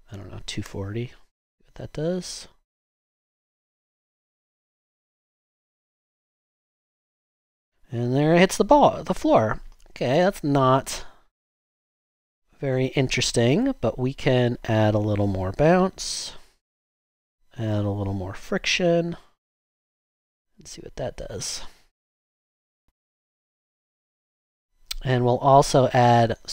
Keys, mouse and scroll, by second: 0.0-0.6 typing, 3.2 click, 7.2 typing, 7.4 Return, 9.3 click, 21.8 typing.